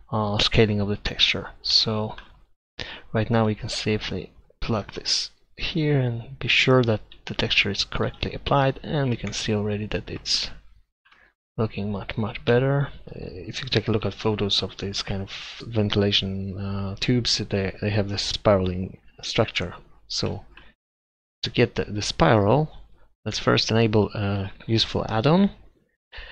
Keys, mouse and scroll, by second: 5.0-6.8 drag, 8.1-9.3 drag, 8.7 Delete, 14.2-15.6 middle drag, 21.4-22.5 middle drag, 22.5-23.2 drag.